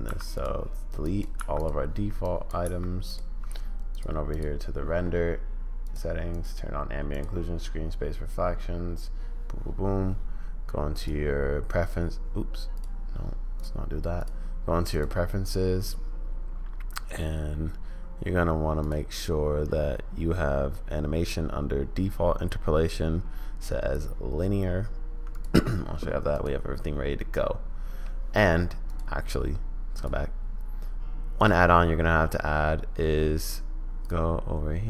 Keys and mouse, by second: 0.0 x, 1.0 drag, 1.3 x, 2.4 click, 2.6 x, 3.9 click, 5.8 click, 6.3 click, 7.1-11.9 drag, 12.9 click, 14.3-15.5 drag, 27.3-28.2 middle drag, 29.0-30.1 drag.